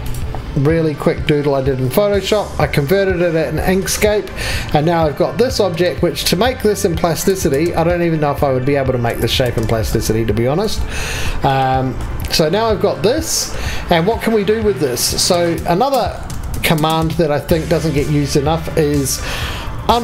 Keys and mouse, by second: 10.6 KP_7, 11.1 KP_7, 16.3 3.